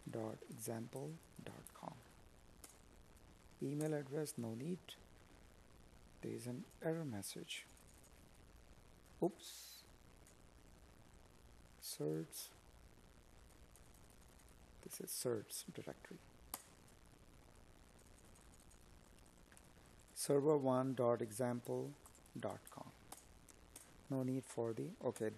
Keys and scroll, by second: 1.1 Up, 24.5 space.